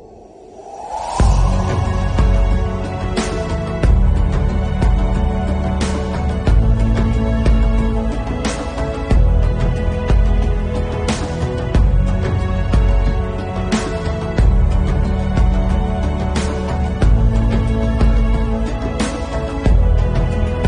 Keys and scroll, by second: 2.3 ctrl+alt+z, 5.2 9, 6.0 [, 15.7 ], 17.2 ctrl+alt+z, 20.1 ctrl+alt+z.